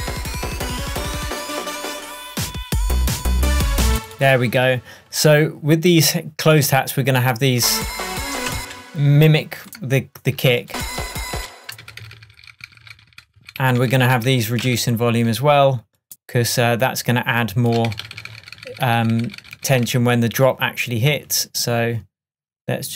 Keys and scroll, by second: 3.9 space, 8.6 space, 11.4 space, 18.0 super+d.